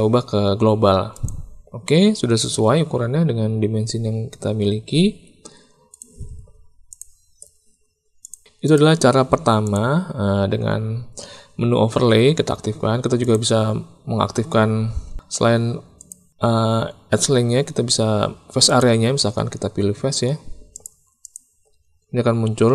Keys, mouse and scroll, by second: 1.1 click, 2.5 Tab, 5.1 Tab, 5.9 click, 6.8 shift+click, 8.1 click, 9.6 click, 11.7 Tab, 13.1-14.9 drag, 15.0 Tab, 16.0-19.1 drag, 20.7 click, 21.3-22.7 drag.